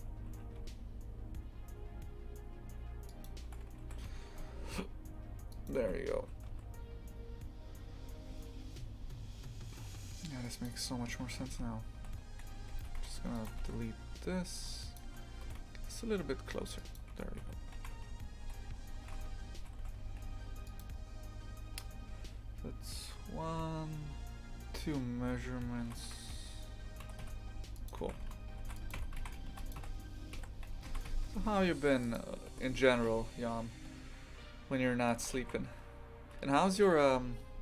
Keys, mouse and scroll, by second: 0.3 s, 3.8 3, 4.0 a, 5.5 alt+shift+right click, 6.2 s, 11.4-12.9 typing, 13.3 alt+shift+right click, 13.6 ctrl+x, 14.2 1, 14.9 shift+click, 15.4 g, 17.1 Tab, 17.4 z, 17.7 shift+f, 25.8 shift+d, 27.0 g, 28.0 shift+f, 28.9 Tab, 29.2 shift+f, 29.7 a, 30.8 shift+f, 32.5 g, 35.3 shift+f.